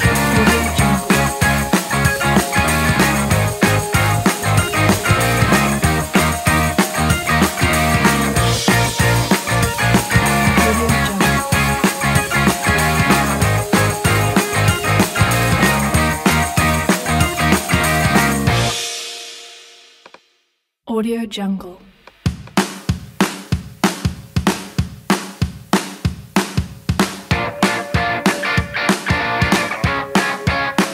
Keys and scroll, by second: 3.2 BackSpace, 9.7 space, 12.2 space, 16.5-17.4 typing, 23.3-25.3 typing, 30.5 super+z.